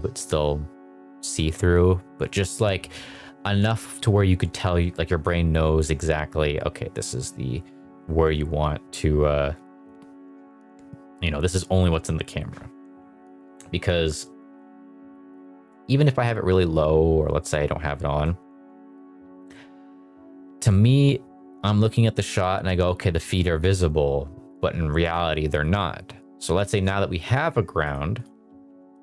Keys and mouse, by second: 9.0 click, 15.1-18.3 drag, 24.4 click, 27.8 click, 28.6 g, 28.9 z.